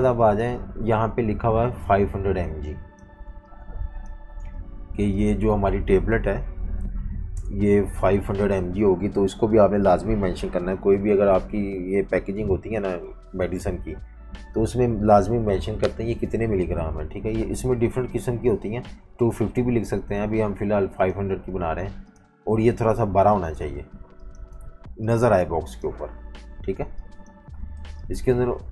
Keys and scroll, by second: 3.3-4.4 typing, 7.3 shift+super+], 8.3 F18, 17.7 F19, 27.8 v, 27.9 space.